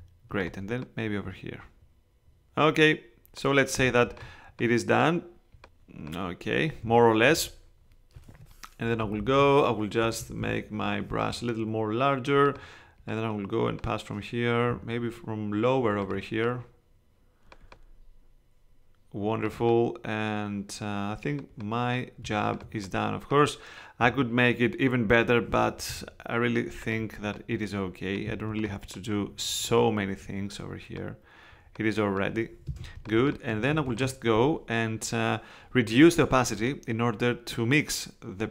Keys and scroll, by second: 8.8 ], 10.0 [, 11.3 alt+[, 32.6 space.